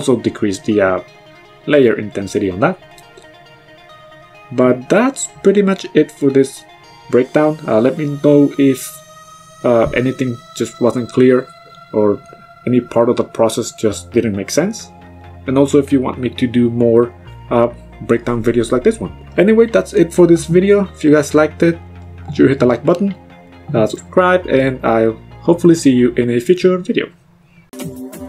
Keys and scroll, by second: 18.1 m.